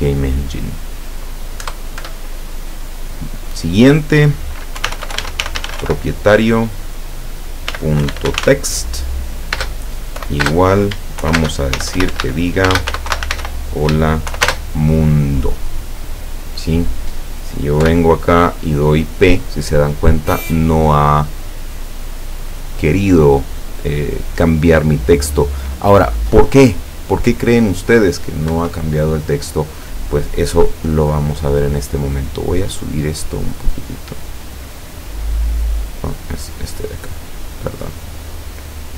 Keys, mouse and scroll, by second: 1.7 Return, 4.8-5.9 typing, 7.7-8.4 typing, 9.6-13.4 typing, 14.5 shift+space, 17.9 p, 28.6 Escape, 33.4-34.5 drag, 34.8 click, 36.5 click, 37.7-38.9 drag.